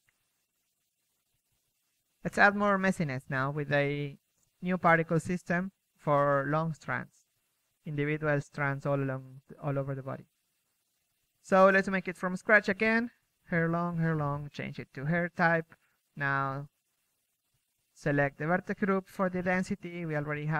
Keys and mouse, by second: 0.0 Escape, 3.0 Escape, 3.0 KP_1, 3.4 KP_3, 3.8 z, 4.1 z, 5.2 click, 5.9-7.5 drag, 16.4-18.0 middle drag.